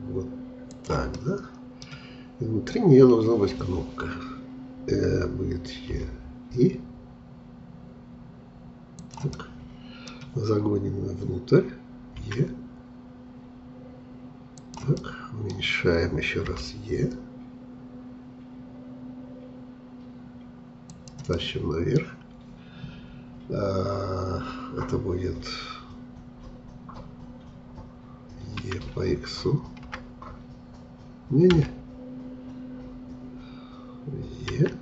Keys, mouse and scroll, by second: 1.2-4.1 middle drag, 9.3-12.2 middle drag, 12.2 e, 15.0-16.5 middle drag, 16.5 i, 21.3-24.4 middle drag, 28.6 e, 34.5 e.